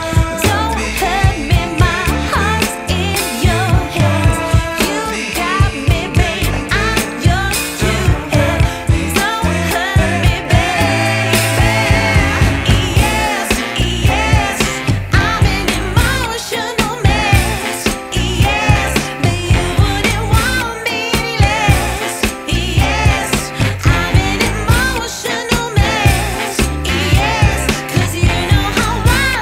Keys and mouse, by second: 0.6 space, 0.7 click, 1.1 space, 2.5 click, 2.6 space, 2.8 click, 5.4 ctrl+alt+e, 9.4 ctrl+alt+e, 10.7 click, 13.9 click, 14.0 click, 15.1 shift+F4, 21.3 click, 23.9 click, 23.9 click, 26.8 click.